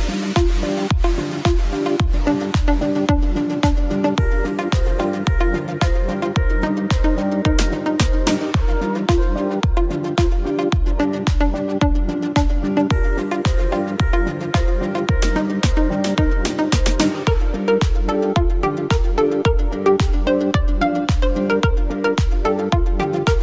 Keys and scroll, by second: 0.8 ctrl+z.